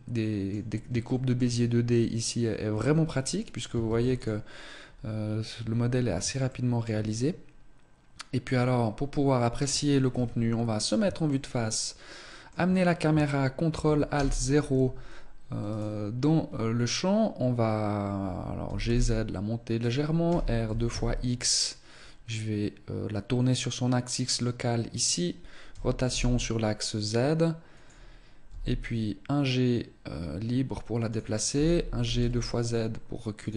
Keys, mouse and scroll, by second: 0.8 shift+middle click, 1.3-2.5 scroll up 2, 1.6 Tab, 2.5 Tab, 3.0-3.4 scroll down 2, 3.6 ctrl+s, 6.2 shift+middle click, 8.2-9.4 scroll down 2, 9.9 KP_1, 11.0 shift+middle click, 13.9 ctrl+alt+KP_0, 15.4 right click, 18.4 g, 19.6 click, 20.0 r, 24.7 click, 25.4 r, 28.2 g, 31.3 g.